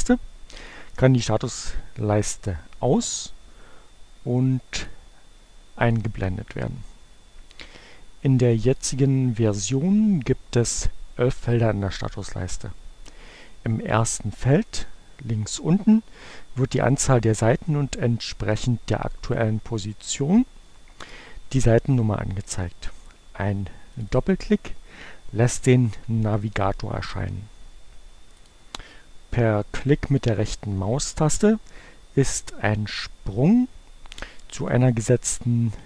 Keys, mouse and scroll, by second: 4.7 click, 5.6 click, 22.8-24.5 drag, 27.8-28.9 drag, 30.6-32.8 right drag, 34.2 click, 35.5 right click.